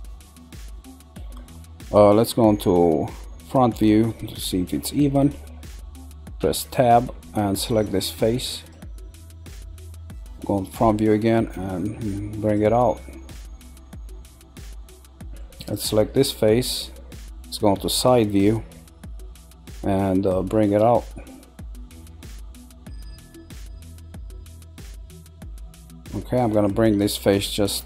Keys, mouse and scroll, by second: 6.4 Tab, 6.8-8.6 middle drag, 8.6 click, 9.1-10.4 middle drag, 10.4 KP_1, 11.3 click, 14.3-15.6 middle drag, 15.6 click, 16.3-18.0 middle drag, 18.0 KP_3, 20.3 click, 22.7 middle click, 24.0-25.4 middle drag, 25.8 middle click, 26.5 click, 27.7 click.